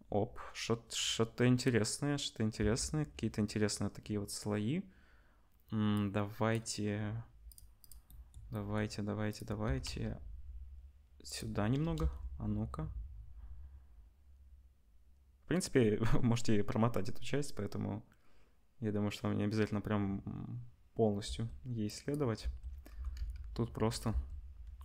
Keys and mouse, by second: 2.6 space, 7.5 middle click, 7.8 click, 7.8-9.3 middle drag, 9.3 click, 9.3-21.8 middle drag, 9.6 r, 11.8 KP_0, 11.9 space, 21.3 space, 21.8-24.0 drag, 22.4 space, 22.9 r, 24.0-24.8 middle drag, 24.0 space.